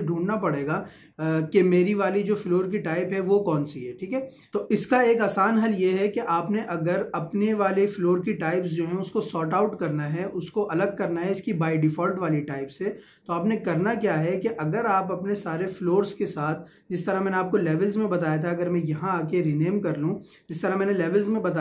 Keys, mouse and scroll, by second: 16.4 click, 19.5 click.